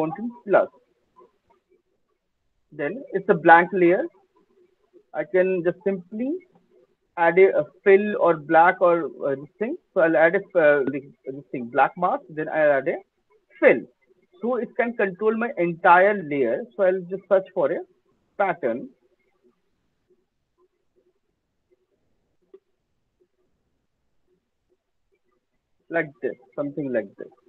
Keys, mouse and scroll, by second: 2.0 click, 3.1 alt+middle click, 3.2 alt+middle click, 4.5 click, 5.5-5.9 alt+scroll, 7.5 right click, 9.3 click, 9.3 scroll, 12.1 click, 13.7 middle click, 13.7 click, 15.7 right click, 15.7 click, 16.7 middle click, 18.8-19.1 scroll, 19.1 click, 19.6 Delete, 20.5-20.9 scroll, 21.3-22.9 scroll, 22.9 scroll, 24.9-25.7 scroll, 26.5 click.